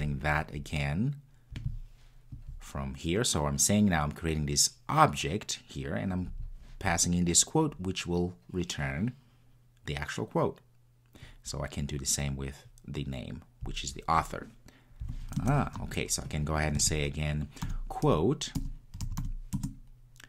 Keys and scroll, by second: 19.6 Return.